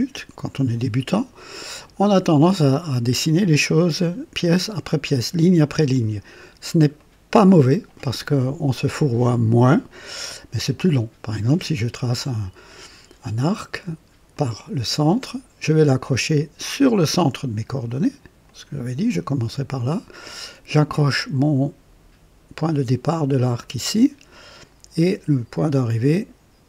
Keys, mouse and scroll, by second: 1.2 right click, 6.4 scroll down 1, 7.0 right click, 14.3 click, 18.4 click, 23.6 click.